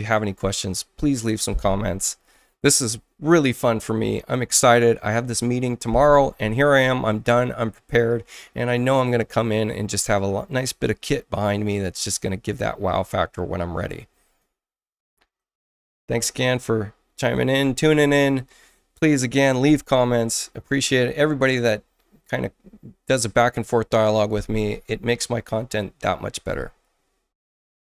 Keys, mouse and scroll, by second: 27.6 shift+F1.